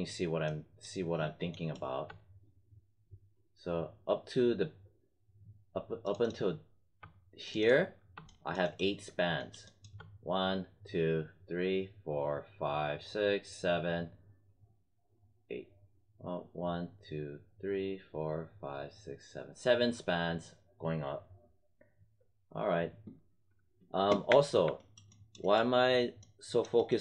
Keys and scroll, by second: 24.2 space.